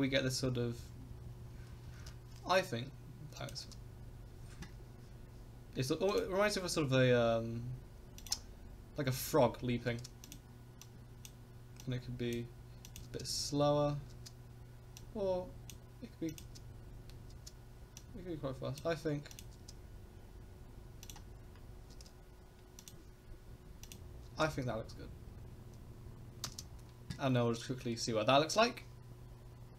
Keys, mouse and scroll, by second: 0.1 Right, 0.2 Right, 0.4 Right, 0.6 Right, 0.8 Right, 0.9 Right, 1.1 Right, 1.2 Right, 1.4 Right, 1.5 Right, 1.7 Right, 1.8 Right, 2.0 Right, 3.4 click, 3.5 space, 6.1 click, 8.2 click, 9.9 space, 10.2 click, 10.8 click, 11.8 click, 12.9 click, 13.0 space, 14.1 space, 15.0 click, 16.3 click, 16.4 space, 17.3 space, 18.0 click, 19.3 click, 19.5 space, 21.0 click, 21.9 space, 23.9 click, 24.2 space, 26.5 space.